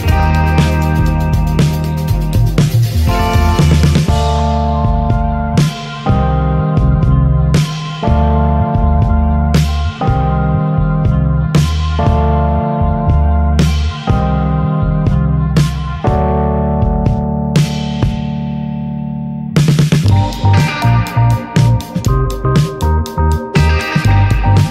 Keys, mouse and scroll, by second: 1.1-2.3 drag, 3.3 click, 5.4 click, 7.3 click, 7.7 middle click, 8.0 s, 9.2 click, 9.4-9.9 shift+middle drag, 9.9 ctrl+s, 10.1 click, 13.3 click, 14.2 click, 14.5-16.1 shift+middle drag, 15.2 ctrl+s, 15.9 ctrl+s, 16.1 click, 16.4-17.5 middle drag, 17.5 ctrl+s, 17.9 ctrl+s, 18.2-20.0 shift+middle drag, 20.0 click, 20.2-20.8 middle drag, 20.8 shift+d, 21.4 alt+middle click, 22.2 click, 23.7 click, 24.0-24.7 middle drag.